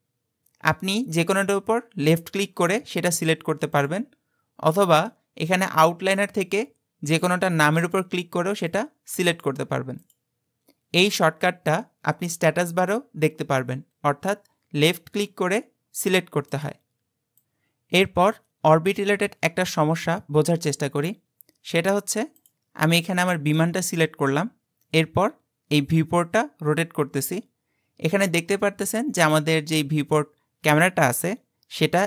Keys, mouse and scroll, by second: 1.4 click, 2.6 click, 3.8 click, 6.1 click, 7.1 click, 7.8 click, 8.7 click, 9.4 click, 10.0 click, 16.5 click, 17.7 click, 18.6-20.6 scroll up 8, 20.6-22.4 scroll up 2, 22.4 click, 25.0-28.1 middle drag.